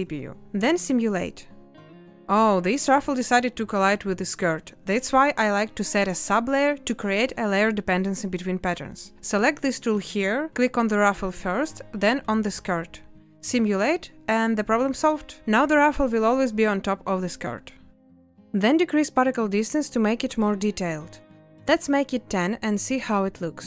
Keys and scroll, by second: 0.7 space, 13.7 space, 18.6 space, 22.5 Return.